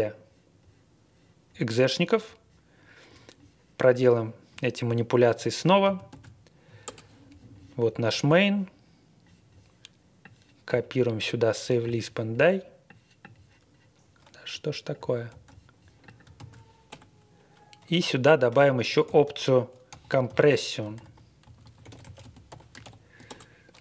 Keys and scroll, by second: 5.8 super+c, 6.1 super+v, 6.8 Return, 15.3 super+c, 16.4 super+v, 16.9 BackSpace, 17.9 Return, 18.5 Tab, 19.1-23.8 typing.